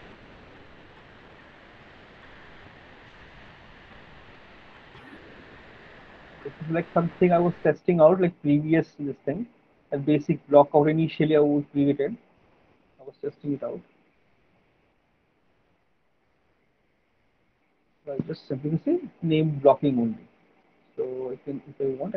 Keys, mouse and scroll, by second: 12.0-14.8 middle click, 14.8 alt+middle click, 14.8 alt+click, 17.8 alt+click, 21.8 click.